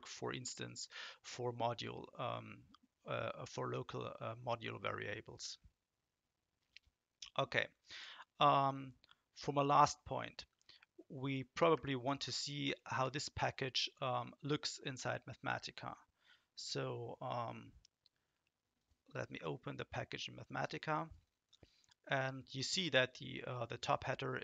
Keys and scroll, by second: 11.5 shift+Up, 11.7 shift+Up, 12.2 shift+Right, 12.9 BackSpace.